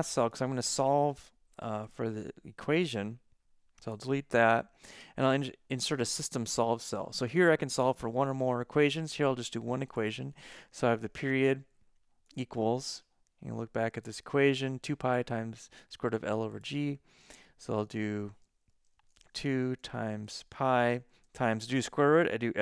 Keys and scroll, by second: 11.4 shift+t, 12.3 =, 18.8 Right, 19.3-22.6 typing.